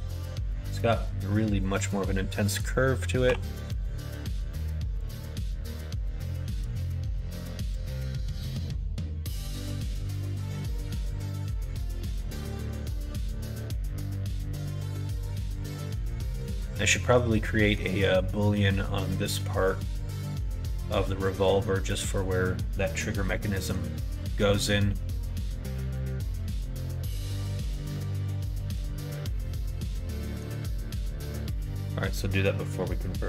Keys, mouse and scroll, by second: 3.2 r, 6.6 KP_1, 7.0 KP_3, 7.8 g, 11.4 s, 17.5 middle click, 21.5 middle click, 23.5 middle click, 25.9 middle click, 26.7 middle click, 27.4-28.8 middle drag, 29.2-30.5 middle drag, 30.7-31.2 scroll up 2, 30.8 middle click, 31.2 middle click.